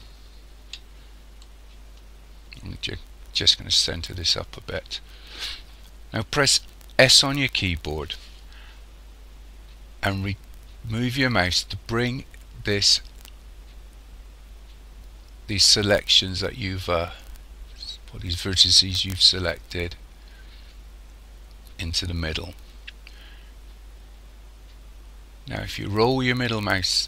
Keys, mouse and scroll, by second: 1.4 shift+middle click, 7.0 s.